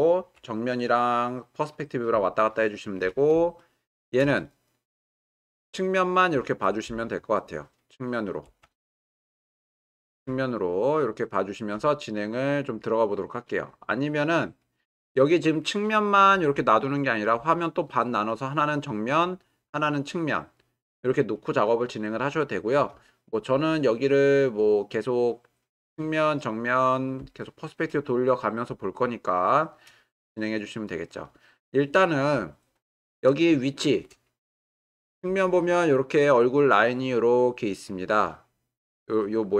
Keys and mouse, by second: 3.6-4.2 shift+middle drag, 4.4-4.9 ctrl+middle drag, 5.2 shift+middle click, 5.7-8.4 middle drag, 8.9 shift+middle click, 10.4-11.7 shift+middle drag, 14.2-16.5 drag, 16.7 shift+middle click, 23.2-23.7 shift+middle drag, 24.1-25.2 middle drag, 25.5-27.0 middle drag, 30.2-31.2 middle drag, 35.3 click, 36.4-39.5 drag.